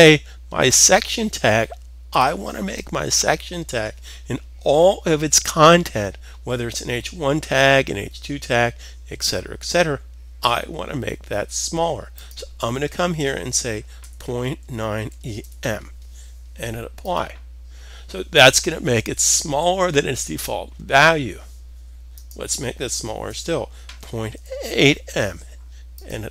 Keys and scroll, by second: 13.6-15.3 typing, 23.8 typing.